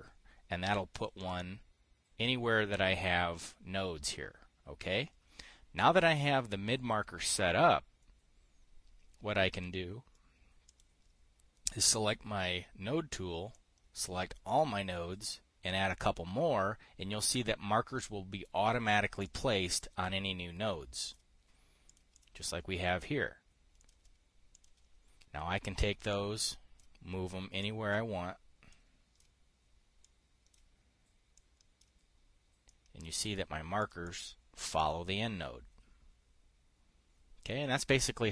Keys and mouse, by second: 1.5 click, 1.8-3.9 drag, 10.0 click, 11.2 click, 14.0-15.1 drag, 19.8 click, 21.5 click, 22.4 click, 22.7 click, 24.3 click, 25.0 click, 26.6 click, 28.1 click, 29.2 click, 30.5 click, 31.9 click, 33.2 click, 34.3 click, 34.7 click.